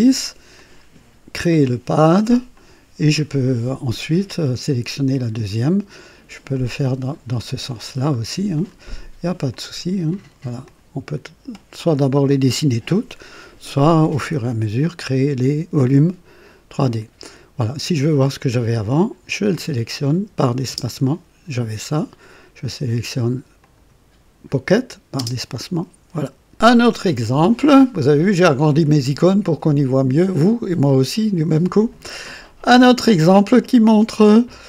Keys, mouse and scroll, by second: 0.5 click, 1.5 click, 2.5 click, 4.2 click, 6.5 click, 8.6 click, 9.5 click, 10.1 click, 10.7 click, 19.5 click, 20.7 space, 23.6 click, 25.1 space, 26.1 click.